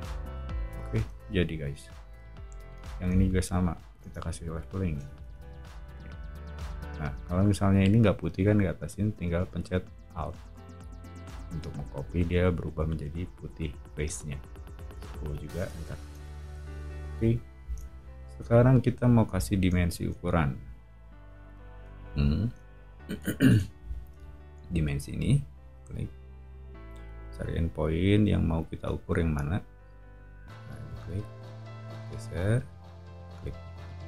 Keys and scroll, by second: 0.2 o, 0.8 scroll, 4.0 space, 5.2 p, 14.7-16.1 typing, 15.6 Return, 16.3 Escape, 16.5 Escape, 16.8 Escape, 17.1 o.